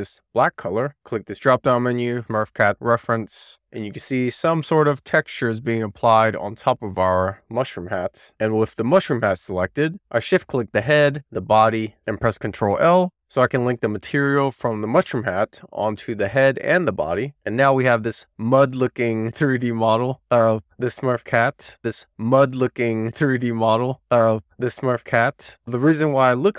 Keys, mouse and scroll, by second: 0.0 click, 1.7 click, 11.3 shift+click, 14.0 ctrl+l, 21.0 click, 21.5 click, 24.8 click, 25.3 click.